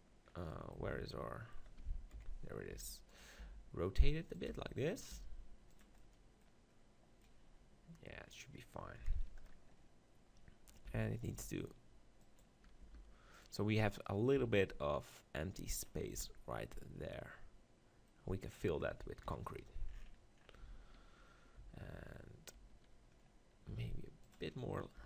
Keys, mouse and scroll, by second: 0.8 z, 2.1 KP_7, 2.7 g, 3.4 r, 4.5 g, 5.1 r, 5.7-7.6 drag, 9.0 KP_7, 10.9 z, 11.3 g, 12.8 g, 13.4-15.3 drag, 14.5 g, 15.8-16.9 drag, 16.1 z, 19.2 KP_7, 20.6 z, 23.7 r, 24.3 click.